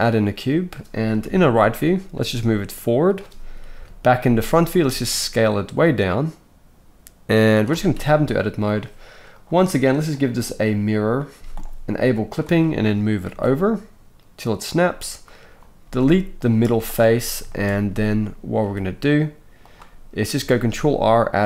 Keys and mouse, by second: 1.2 KP_3, 2.1 g, 3.7 KP_1, 4.4-9.4 middle drag, 4.7 s, 8.2 Tab, 9.4-12.3 drag, 11.4 z, 12.3-15.3 shift+middle drag, 13.2 g, 15.3-19.7 drag, 15.8 x, 16.6 z, 17.9 a, 18.6 g, 19.7-21.4 middle drag, 20.5 ctrl+r.